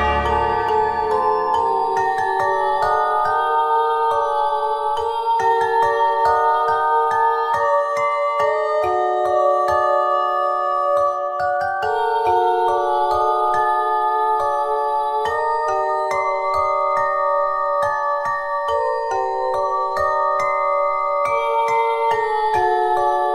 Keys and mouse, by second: 2.0 r, 9.3-10.7 middle drag, 12.2 click, 12.7 Tab, 13.4 Tab, 18.9 Tab, 21.4 Tab.